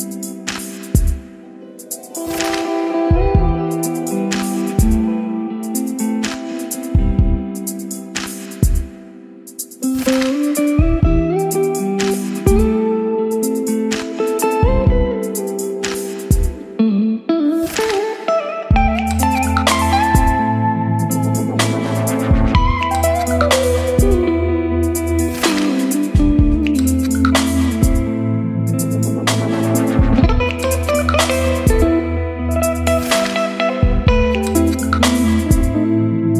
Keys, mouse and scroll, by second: 3.9-24.1 drag, 24.1-25.4 typing, 26.2-27.4 drag, 27.4 Return, 28.2 Up, 28.4-29.3 typing, 30.6-36.3 typing.